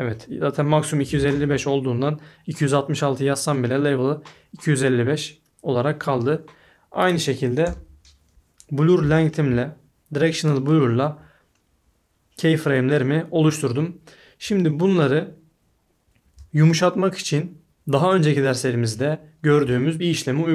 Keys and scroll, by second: 7.6 BackSpace.